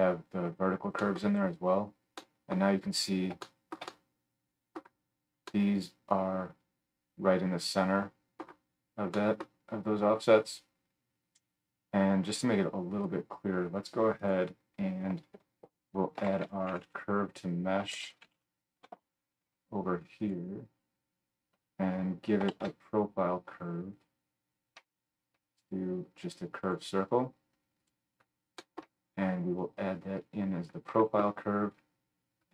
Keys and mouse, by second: 14.3-29.8 middle drag, 15.4 F3, 22.5 shift+a, 29.8-32.5 drag.